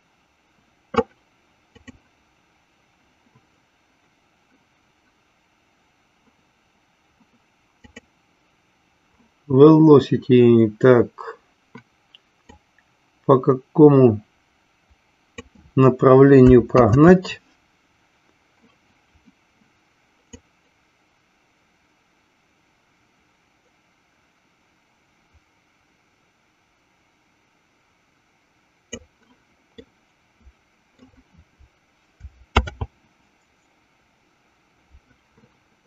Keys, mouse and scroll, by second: 2.5 click, 12.5-16.0 drag, 17.8 ctrl+z, 20.4-29.4 drag, 30.2-31.5 middle drag, 33.5 ctrl+z.